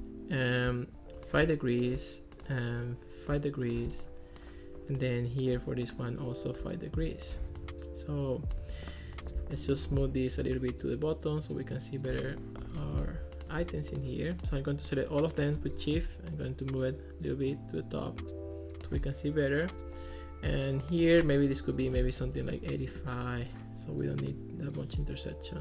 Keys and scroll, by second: 21.9-22.8 typing.